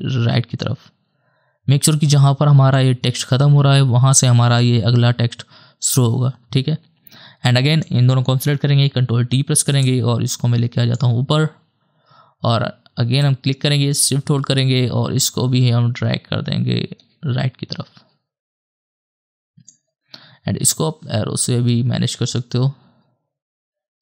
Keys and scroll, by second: 8.6 ctrl+d, 20.6 Right, 22.8 Left.